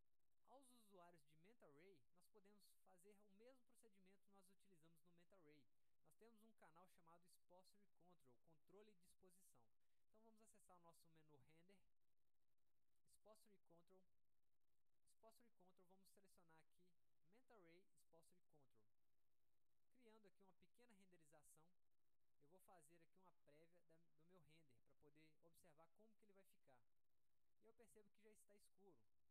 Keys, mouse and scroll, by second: 0.4 click, 1.4-2.5 drag, 11.6 click, 13.9 click, 15.0-15.4 drag, 16.4 click, 18.6 click, 21.0 click.